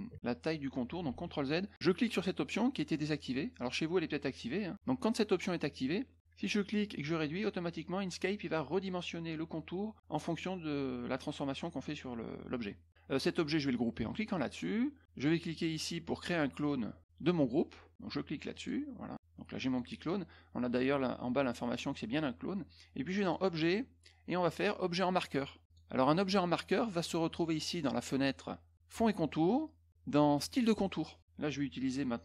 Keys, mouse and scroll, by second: 1.0 ctrl+z, 5.4 click, 6.7-8.2 ctrl+drag, 12.6 ctrl+click, 14.3 click, 15.7 click, 18.5 click, 19.1 click, 23.2 click, 25.6 click, 28.9 click, 30.4 click.